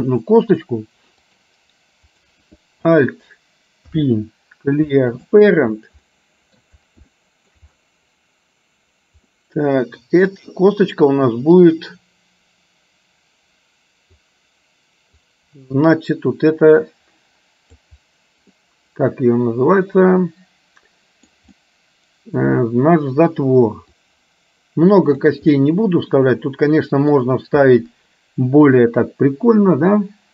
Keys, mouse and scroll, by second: 2.2 click, 4.0 alt+p, 6.2 middle click, 7.2 shift+middle click, 9.5 middle click, 11.6-14.3 drag, 15.5-18.0 drag, 18.8-21.5 middle drag, 21.7 middle click, 24.2-25.3 drag, 25.6-27.2 scroll up 1.